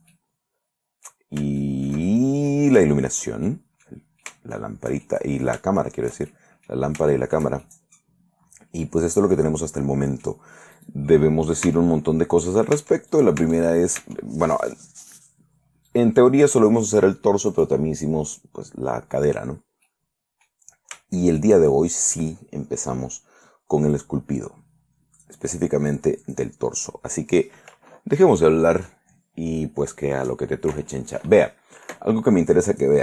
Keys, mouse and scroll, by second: 1.8-2.9 shift+middle drag, 3.1 shift+middle click, 3.6-4.2 shift+middle drag, 5.2 shift+middle click, 6.0 shift+middle click, 6.8 middle click, 7.3 shift+middle click, 7.8-10.6 shift+middle drag, 10.9 right click, 11.8 Tab, 12.9 Tab, 13.3 right click, 14.8 right click, 16.0 right click, 17.7 right click, 20.0 middle click, 21.1 shift+middle click, 21.9 shift+middle click, 24.1 right click, 25.3 click, 26.4 click, 32.9 click.